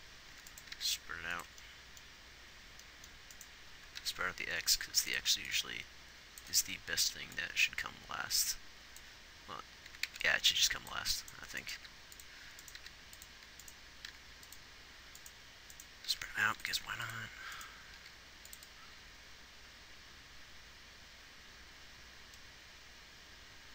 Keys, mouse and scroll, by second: 1.1 g, 4.3 g, 12.2 g, 13.1 g, 16.5 g, 17.0 x, 18.3 g.